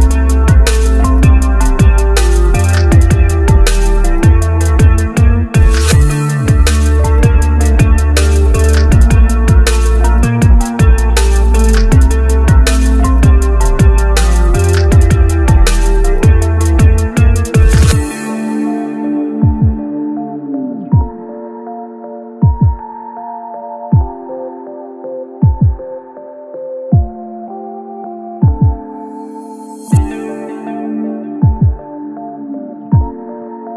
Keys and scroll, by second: 3.8-6.6 typing, 23.9 alt+c, 28.3-29.1 typing, 33.1 1.